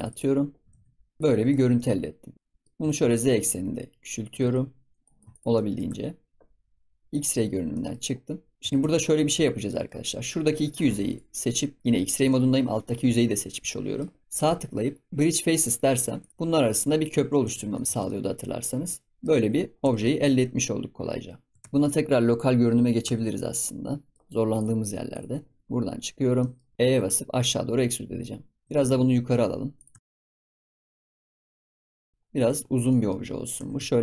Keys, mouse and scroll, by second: 0.5 s, 1.4 ctrl+s, 1.7 middle click, 2.7 Tab, 2.8 s, 5.3 shift+middle click, 5.3 s, 5.5 middle click, 5.8 Tab, 7.0 click, 7.4 scroll up 3, 7.7 middle click, 8.0-8.5 scroll down 2, 8.5 click, 8.6 Tab, 9.1-10.4 middle drag, 10.4 click, 12.2-14.3 middle drag, 14.3-16.3 right drag, 17.0 click, 17.4 Tab, 17.4 scroll down 2, 17.7 middle drag, 17.8 ctrl+s, 18.0-19.3 middle drag, 19.3 Tab, 19.6 scroll down 3, 19.8 Tab, 20.0-21.3 middle drag, 21.3 scroll up 1, 21.5 Tab, 22.5 KP_Divide, 23.0 Tab, 23.6 middle click, 24.2 scroll up 1, 24.5 shift+click, 25.1 shift+click, 25.6 KP_Divide, 26.1 scroll down 1, 26.3 middle click, 26.7 scroll up 2, 26.7 e, 28.6 Tab, 28.7 g, 29.9 Tab, 30.2 e, 30.8 ctrl+z, 31.8 scroll down 2, 32.0 middle click, 32.4 ctrl+s, 32.6 scroll down 3, 32.8 middle click, 33.2-33.5 scroll up 7, 33.5 Tab, 33.7 s.